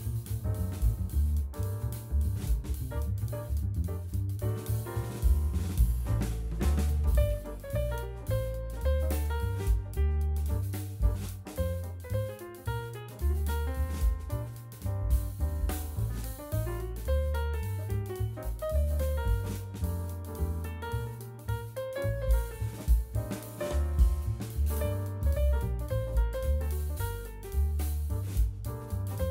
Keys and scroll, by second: 4.1 /, 12.9 ctrl+a, 13.3 0, 14.5 Return, 17.2 v, 27.6 0, 28.4 2.